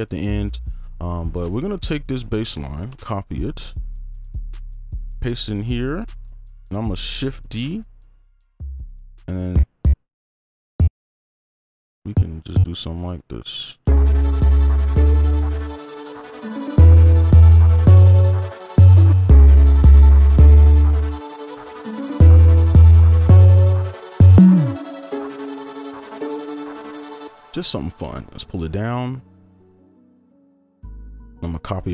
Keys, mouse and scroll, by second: 0.5-1.0 scroll up 1, 1.0-1.6 scroll down 1, 1.6 ctrl+click, 3.3 ctrl+c, 4.6 right click, 6.1 ctrl+Caps_Lock, 6.8 ctrl+c, 7.6 right click, 8.2 double click, 12.5 double click, 13.1 right click, 13.8 space, 15.7 ctrl+a, 16.1 alt+scroll up 10, 17.3 right click, 19.1 space, 19.2 space, 20.7 right click, 21.0 ctrl+click, 21.3 ctrl+Up, 21.4 right click, 25.5 alt+click, 25.9 alt+right click, 26.6 right click, 27.2 space, 27.6 ctrl+s, 28.1 ctrl+Down, 29.4 shift+click.